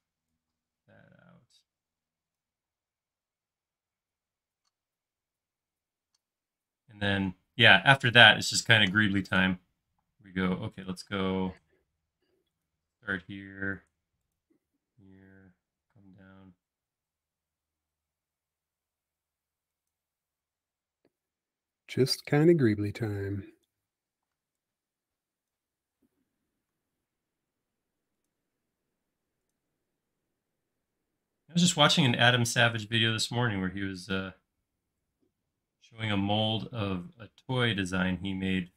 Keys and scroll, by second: 2.8 space, 10.0-11.1 typing, 24.2 p, 26.1-26.5 typing, 28.3 typing.